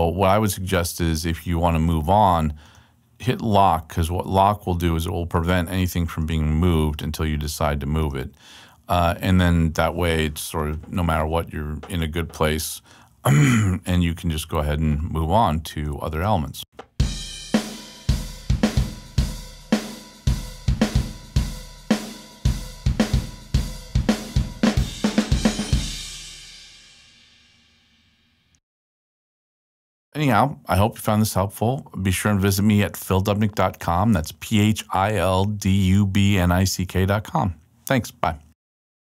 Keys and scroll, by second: 13.6 super+Left, 16.6 space.